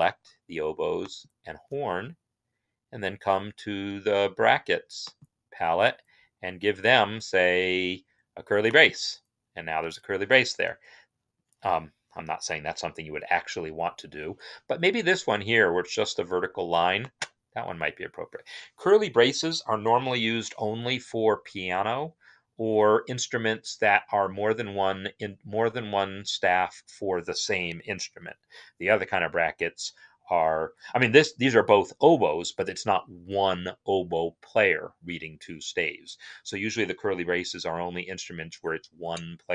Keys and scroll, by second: 13.7 ctrl+z.